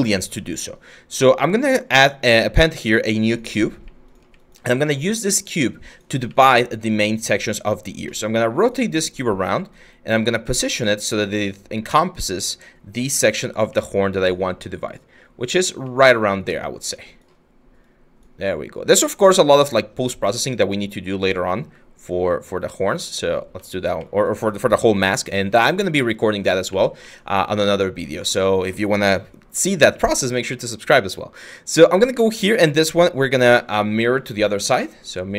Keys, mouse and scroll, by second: 4.4 w, 26.3 q.